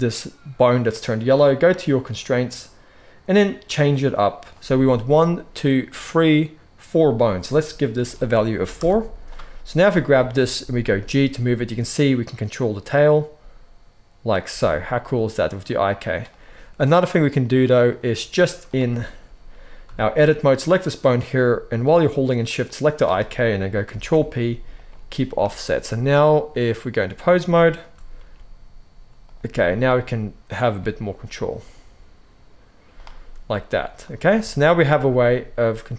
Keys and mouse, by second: 2.0 click, 2.2-3.2 middle drag, 3.2-9.7 drag, 9.7-10.3 middle drag, 10.3-18.7 drag, 10.7 g, 18.7-26.0 shift+middle drag, 23.8 ctrl+p, 26.0-27.7 drag, 27.7-35.9 middle drag, 28.1 g, 29.5 r, 30.7 g, 33.3 r, 34.9 g.